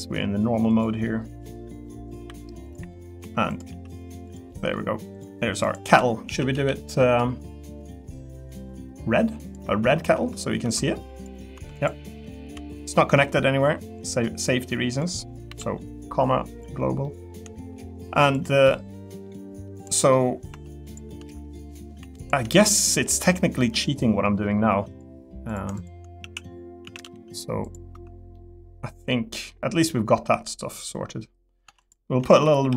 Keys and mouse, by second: 1.0 middle click, 1.8 middle click, 2.2 e, 2.9 middle click, 3.2 3, 3.7 e, 4.5 middle click, 5.8 l, 6.2 a, 6.5 g, 9.4 click, 9.8 Tab, 11.7 click, 12.4 l, 17.0 middle click, 17.5 shift+middle click, 17.8 middle click, 18.3 click, 18.6 middle click, 19.7 click, 20.1 middle click, 20.5 Tab, 20.9 click, 22.0 3, 22.2 click, 25.7 shift+click, 26.2 a, 26.8 a, 27.0 g, 27.6 click, 27.9 Tab, 28.3-29.5 middle drag, 31.6 Tab, 32.3-32.7 typing.